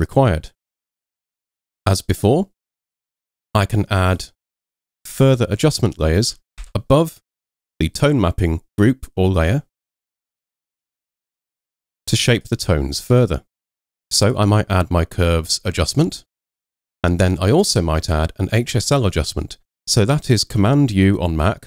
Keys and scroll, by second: 6.6 super+m.